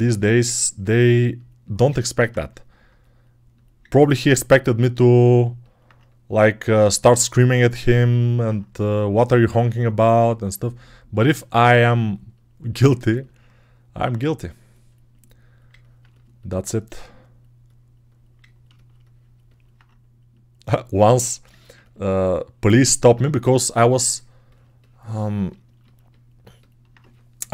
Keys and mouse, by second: 3.7 right click, 3.8 alt+click, 4.0-12.9 right drag, 12.9-18.6 alt+drag, 22.0-27.5 alt+drag.